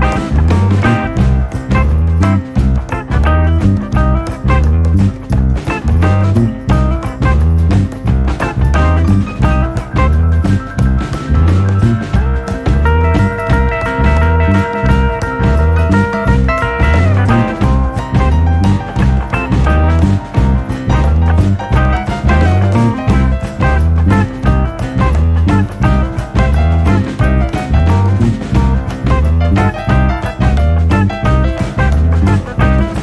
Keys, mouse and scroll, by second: 4.7 Tab, 5.5-8.3 middle drag, 8.3 KP_7, 9.2 KP_Decimal, 10.4-13.5 scroll up 3, 13.5 click, 17.1 click, 18.5-18.9 scroll up 1, 18.9 shift+middle click, 19.3-20.0 shift+scroll up 2, 23.2 e, 31.4-31.9 scroll down 2, 32.2 middle click.